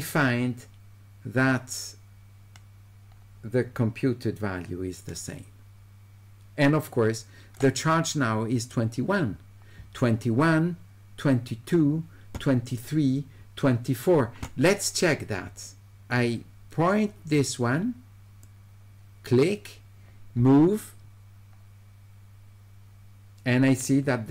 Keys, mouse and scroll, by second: 18.4-24.3 drag.